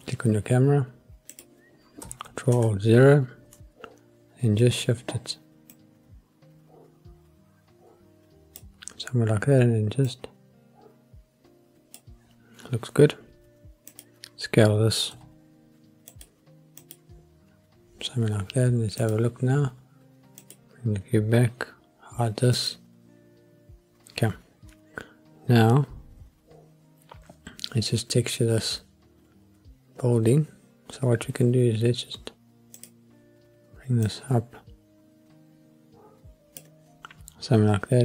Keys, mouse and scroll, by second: 1.3 click, 2.5 ctrl+alt+KP_0, 5.7-8.6 drag, 10.0-12.1 drag, 13.9 click, 15.1 s, 16.1 click, 16.7 click, 19.2 click, 20.4 click, 22.5 click, 32.7 click, 34.0-36.7 drag.